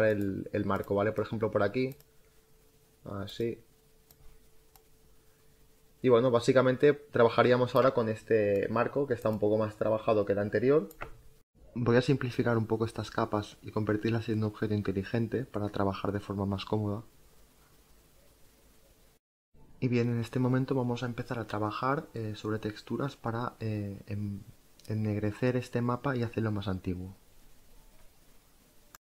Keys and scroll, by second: 19.9 ctrl+alt+z.